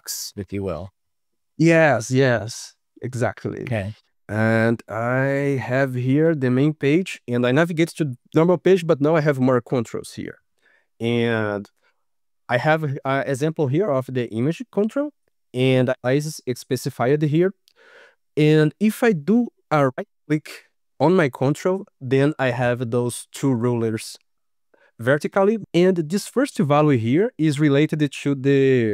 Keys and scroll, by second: 4.0 ctrl+s.